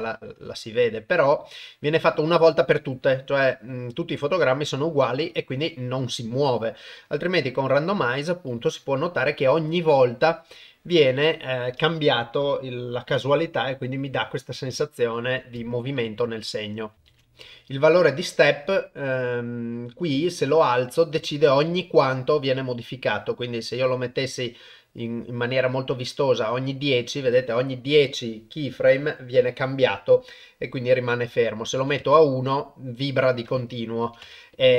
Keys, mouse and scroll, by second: 5.3 click, 18.6 click, 20.2 click, 20.7 click, 22.9 click, 23.1 click, 23.6 click, 24.6 click, 25.1 click, 31.3 click, 33.7 click.